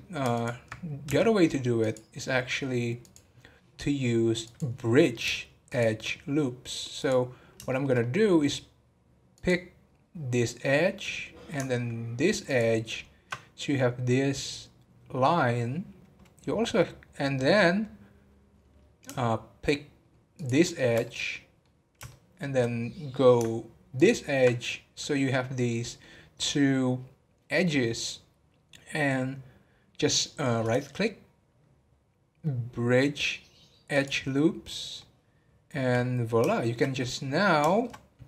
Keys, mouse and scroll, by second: 3.9 scroll up 1, 7.7 shift+middle click, 8.0-9.2 scroll up 1, 21.0 middle click, 21.7 scroll down 2, 22.1-29.2 shift+middle drag, 30.8-34.9 right drag, 34.9 middle click, 35.8 scroll down 1, 36.5 shift+middle click, 36.9 scroll up 1, 37.6 scroll up 1, 37.7 shift+middle click.